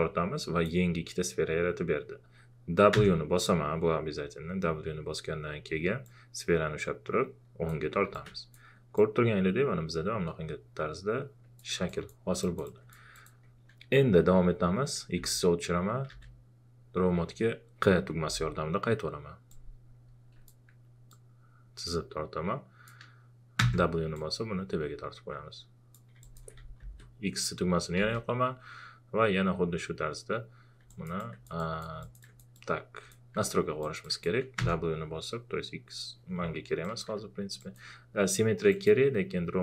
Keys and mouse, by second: 2.9 w, 6.1-8.1 drag, 8.1-11.9 alt+drag, 13.2 alt+click, 15.1-16.6 typing, 19.5-21.1 drag, 21.1-23.6 drag, 23.6 w, 24.1-26.6 drag, 26.8 x, 28.0 q, 30.8 q, 30.9 alt+click, 34.6 w, 36.8 click.